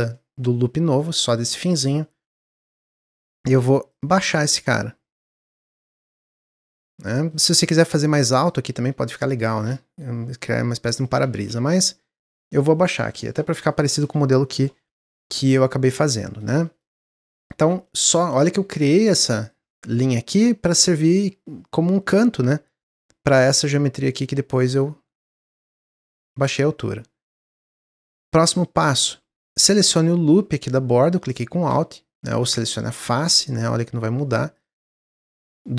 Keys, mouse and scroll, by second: 2.8-3.9 drag, 7.1 middle click, 7.7 click, 9.2-11.3 shift+middle drag, 11.3 ctrl+z, 11.9-14.9 middle drag, 15.0-18.7 middle drag, 18.7-19.4 scroll down 1, 19.4 alt+click, 23.4 click, 24.7 click, 27.8-29.7 middle drag, 29.7 alt+click, 30.2-31.4 middle drag, 31.4 scroll up 1, 32.3 click, 33.0 click, 33.6 click, 34.5 click, 35.1 click, 35.5-35.7 middle drag.